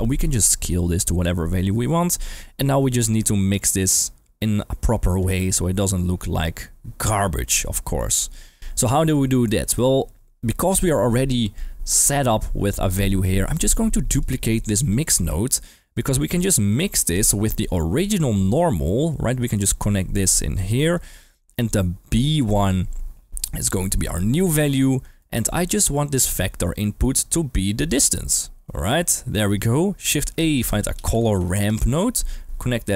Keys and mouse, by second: 0.6-5.2 drag, 6.2-9.1 drag, 9.4 middle click, 13.4 click, 14.4 click, 14.8 shift+d, 15.2 click, 15.7 g, 15.9 click, 16.8 middle click, 17.6 middle click, 20.1-20.9 drag, 21.2 middle drag, 23.9-24.9 drag, 25.2-25.5 middle drag, 27.0 middle click, 27.8-28.9 drag, 30.1 shift+a, 31.3 r.